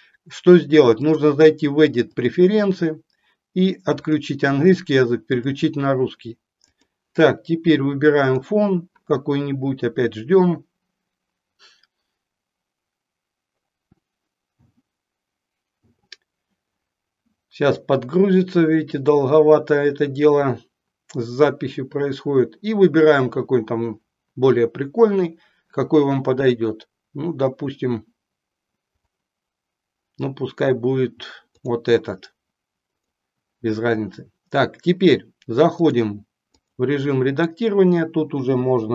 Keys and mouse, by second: 1.1-2.6 drag, 35.7-36.8 drag, 38.5 BackSpace, 38.8 BackSpace.